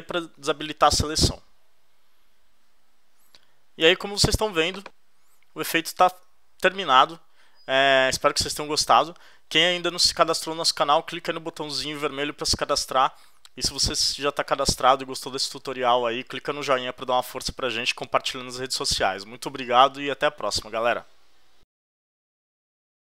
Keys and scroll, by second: 1.1 super+d.